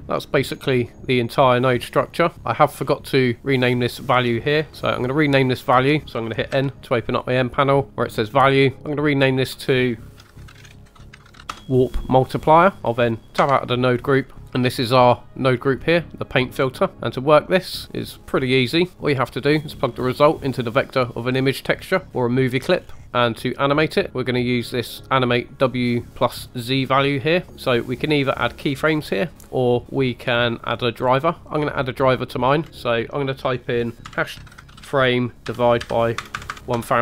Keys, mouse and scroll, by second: 0.0 Tab, 0.0 scroll down 5, 0.8 middle click, 2.3 click, 2.3 scroll up 2, 2.5 middle click, 2.9-3.4 scroll up 2, 4.9 click, 5.8 middle click, 6.6 n, 8.1 click, 9.2 click, 9.4 click, 13.4 Tab, 14.4 middle click, 14.9 click, 16.6-16.9 scroll down 2, 16.9 middle click, 17.2 click, 18.9-19.3 drag, 18.9 middle click, 18.9-19.3 scroll up 3, 22.8 scroll up 2, 24.1-27.0 drag, 32.7 click, 36.4 KP_0, 36.5 KP_0.